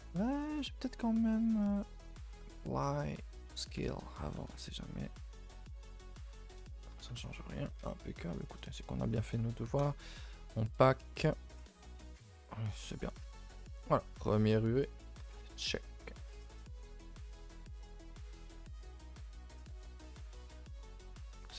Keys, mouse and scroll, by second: 0.4 click, 3.5 click, 3.8 Tab, 6.2 u, 7.0 a, 7.8 n, 9.9-13.0 drag, 13.0 Tab, 15.4 n, 16.4 scroll down 2, 16.6 middle click, 16.8 a, 17.0 a, 17.2 click, 17.9 click, 18.3 a, 18.9 alt+h, 19.2 a, 19.4 a, 19.9-20.3 shift+middle drag, 20.3-20.7 middle drag, 20.7 scroll down 2, 20.9-21.5 middle drag, 21.5 scroll down 1.